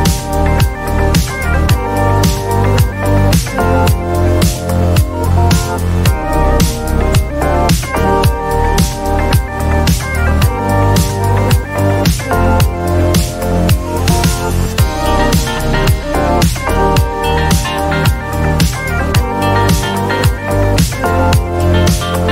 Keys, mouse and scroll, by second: 0.7 click, 3.4 click, 3.6 click, 4.7-5.7 typing, 7.9 click, 9.2 click, 10.3 click, 11.6 right click, 12.5 click, 14.6 click, 15.5 click, 17.8 ctrl+j, 17.8 click, 18.1 ctrl+j, 20.2 click, 20.3 click, 21.1-21.6 typing.